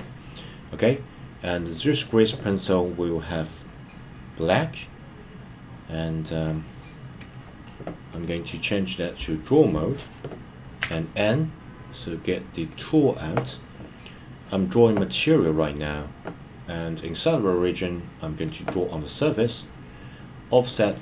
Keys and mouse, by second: 1.7 click, 8.2-9.6 drag, 10.8 n, 12.7 click, 17.2-21.0 drag.